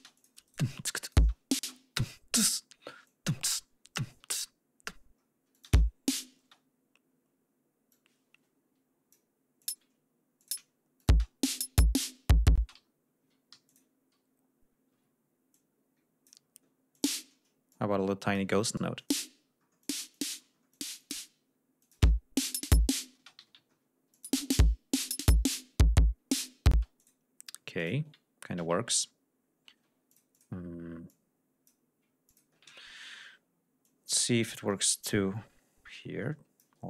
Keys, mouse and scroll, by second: 0.1 shift+click, 0.4 shift+right click, 0.9 shift+click, 1.1 shift+space, 1.8 shift+d, 3.0 click, 4.1 ctrl+y, 5.5 click, 5.6 space, 6.4 space, 7.8-9.2 drag, 9.5 click, 10.3 click, 10.9 click, 11.1 space, 12.5 space, 12.8 ctrl+scroll down 2, 13.4 ctrl+g, 13.6 ctrl+click, 14.8 d, 15.5 click, 16.5 ctrl+scroll up 2, 16.9 ctrl+click, 17.6 click, 19.0 click, 19.4-19.8 scroll down 2, 19.8 click, 20.2 click, 20.4-20.7 scroll down 2, 20.7 click, 21.8 click, 22.0 space, 23.2 space, 23.5 g, 23.6 ctrl+scroll down 2, 24.1 ctrl+click, 24.3 space, 26.0 ctrl+scroll down 2, 26.5 ctrl+scroll up 2, 26.7 ctrl+space, 27.0 ctrl+click, 27.8 ctrl+click, 28.6 ctrl+y, 30.1-30.6 ctrl+drag, 31.1 click, 32.3 ctrl+click, 33.8-36.8 ctrl+drag.